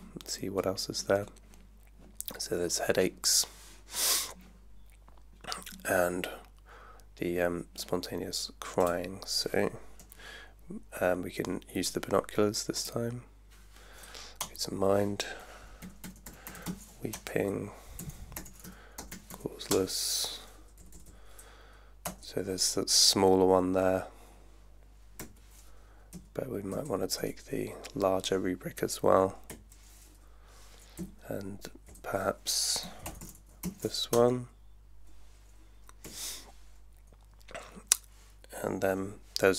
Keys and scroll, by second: 14.4 Return, 15.6-19.8 typing, 20.8 Down, 22.0 Return, 25.2 =, 26.1 Up, 26.8 Up, 27.3 Up, 29.5 =, 31.0 Left, 32.6-34.1 typing, 36.1 =.